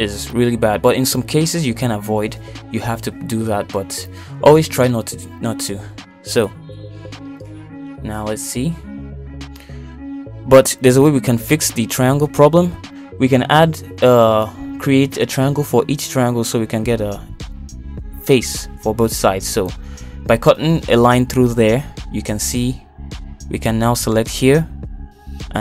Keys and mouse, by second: 5.5 middle click, 16.3 k, 21.4 middle click, 23.5 click, 24.6 click.